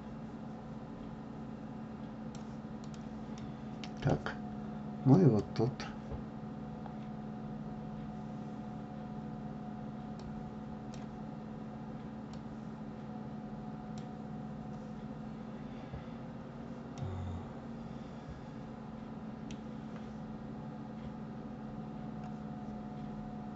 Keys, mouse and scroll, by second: 3.5-5.3 middle drag, 5.3 click, 10.2 click, 12.5 drag, 17.1-23.5 middle drag.